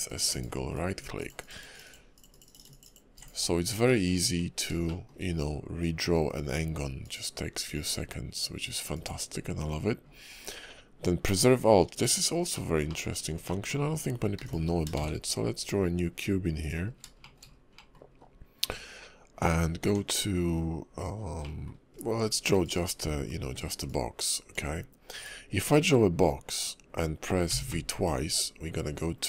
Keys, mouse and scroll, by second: 0.7 ctrl+click, 3.9 middle click, 4.5-4.8 scroll up 2, 4.8 shift+middle click, 7.0 click, 8.9 click, 12.5 middle click, 12.9 middle click, 13.5 shift+middle click, 13.8-14.3 scroll down 1, 14.3 x, 15.0 shift+a, 16.9 scroll up 2, 17.2 shift+middle click, 17.4-17.9 scroll down 3, 17.7 middle click, 18.1-18.6 scroll up 1, 18.6 Tab, 19.8 Tab, 21.4 middle click, 21.9 click, 23.0 d, 23.8 click, 25.7 click.